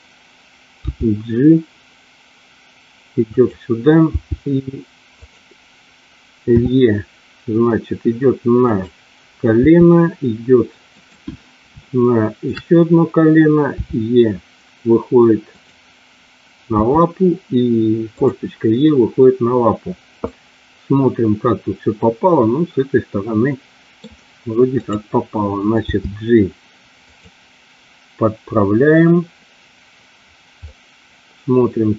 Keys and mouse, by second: 0.9 g, 3.2 click, 4.1 g, 5.1 click, 6.6 e, 8.6 click, 9.6 e, 11.7 shift+middle click, 13.7 e, 15.5 click, 16.8 e, 18.1 click, 20.3-23.9 middle drag, 24.7 click, 25.7 g, 27.1 click, 30.6-31.9 middle drag.